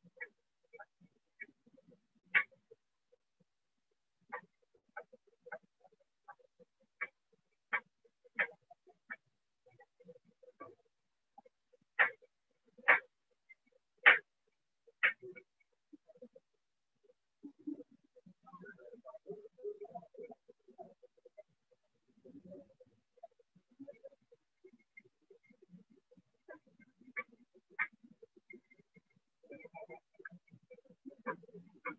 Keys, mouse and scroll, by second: 0.4 click, 0.6 click, 0.9 click, 2.7 shift+click, 3.6 click, 4.5-5.3 scroll, 5.2 click, 6.2 click, 6.8 click, 7.2 click, 7.8 alt+click, 9.1 click, 9.6 click, 10.7-13.4 alt+click, 12.3 click, 13.4 click, 14.3 click, 14.8 click, 16.1 click, 17.4 click, 17.9 click, 18.1 click, 18.2 click, 18.8 click, 19.6 alt+click, 23.4 shift+click, 24.4 right click, 24.9 alt+click, 26.3 shift+click, 26.9 alt+click, 28.8 alt+click, 29.2 alt+click, 29.6 click, 30.2 alt+click, 31.3 click, 31.8 right click.